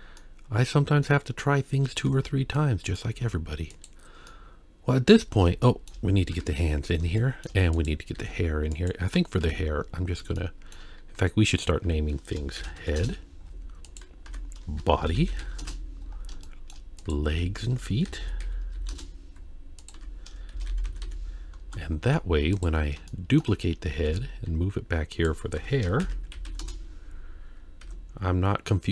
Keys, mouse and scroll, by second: 0.2 middle click, 2.1 Tab, 2.6-3.0 middle drag, 3.1 z, 4.3-5.1 middle drag, 5.3 scroll down 1, 5.6 shift+middle drag, 6.3 KP_1, 7.2 shift+middle click, 7.7 click, 8.1 g, 9.6 KP_3, 10.0-10.4 scroll up 2, 10.4-10.7 shift+middle drag, 11.9 F2, 13.9 click, 14.3 F2, 16.2 scroll down 1, 16.4 shift+middle drag, 17.0 click, 17.3 F2, 19.8 click, 20.0 F2, 20.9 e, 22.5 click, 23.1-23.4 shift+middle drag, 23.5-23.9 scroll up 2, 24.1 shift+d, 25.6 F2, 27.8 Tab.